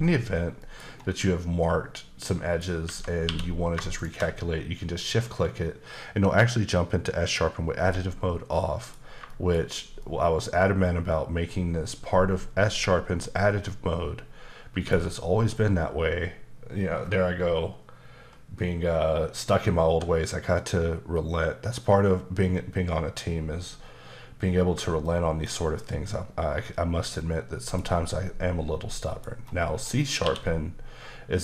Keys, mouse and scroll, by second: 0.6 middle click, 0.9-2.2 scroll up 1, 2.2 middle click, 2.8 Tab, 3.2 q, 4.0 shift+click, 8.5 middle click, 9.3 shift+middle click, 25.0 shift+middle click, 25.8-26.8 scroll down 1, 27.2 middle click, 29.0 middle click, 29.3-30.2 scroll up 2, 30.2 q.